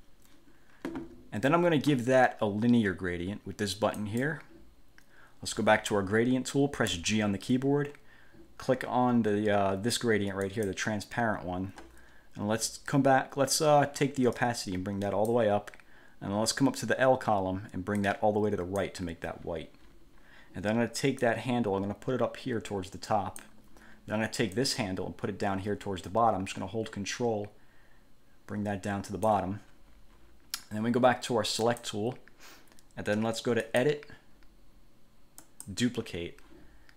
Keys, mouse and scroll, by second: 4.2 click, 7.1 g, 10.6 click, 14.5 click, 18.1 click, 21.4-23.7 drag, 24.7-29.7 drag, 31.7 click, 33.8 click, 35.6 click.